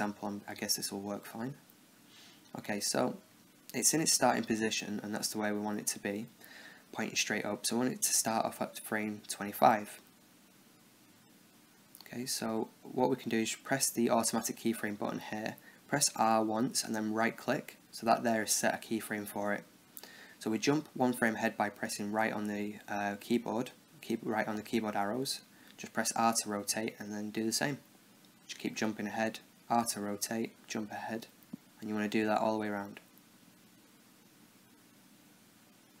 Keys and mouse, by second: 0.7 click, 0.7 right click, 1.5 Tab, 1.7 middle click, 2.9 click, 9.5-11.4 drag, 13.9-15.7 drag, 15.9 r, 19.5 Right, 20.7-24.0 middle drag, 22.5 r, 25.5 Right, 26.3 r, 28.1 Right, 28.6 r, 30.7 Right, 31.3 r, 32.3 Right, 32.4-36.0 typing, 32.7 Right, 33.2 middle click, 33.3 Right, 33.7 Right, 34.1 Right, 34.5 Right, 34.8 Right, 35.3 Right.